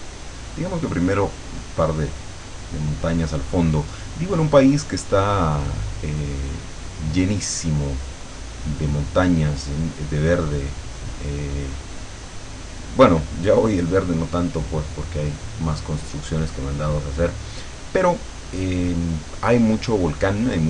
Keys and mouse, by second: 4.8-6.1 drag, 6.3-10.0 drag, 10.3-13.9 drag, 14.8 click.